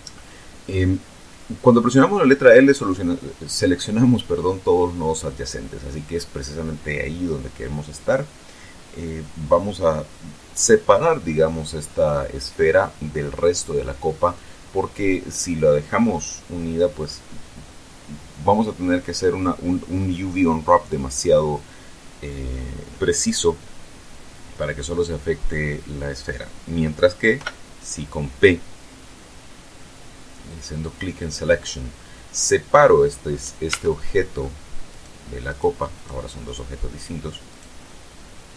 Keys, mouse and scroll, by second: 1.9-5.2 drag, 28.0 p, 31.4 click, 33.0-34.0 middle drag, 34.2 Tab, 34.6 middle click, 35.5 right click, 36.0 right click, 36.5 right click, 37.5 right click, 38.0 right click, 38.4-38.5 middle drag.